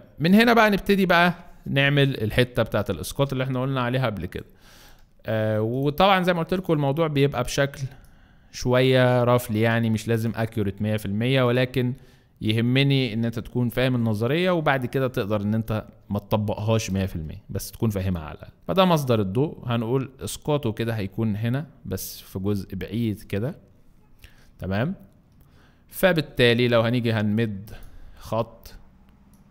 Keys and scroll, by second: 13.7 [, 15.8 [, 16.4 [, 17.0 space.